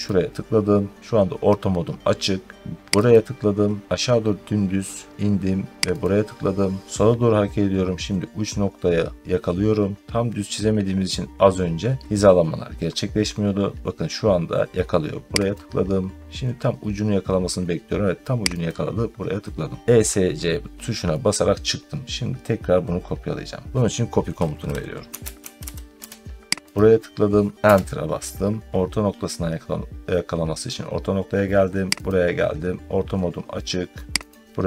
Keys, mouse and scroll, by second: 3.0 click, 5.9 click, 15.4 click, 18.6 click, 24.8-26.0 typing, 26.6 click, 27.5 Return, 31.9 click, 34.2 click.